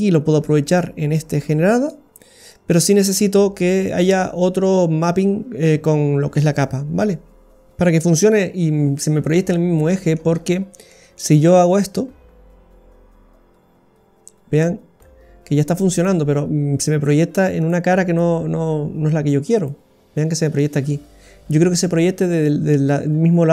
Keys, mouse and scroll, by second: 0.7 click, 2.5 click, 7.1-7.7 scroll down 1, 9.5 scroll down 1, 9.7 middle click, 10.3-10.9 scroll up 7, 10.9 middle click, 11.9 click, 16.0 click, 17.6 click, 18.0 click, 19.5 click, 20.6 middle click.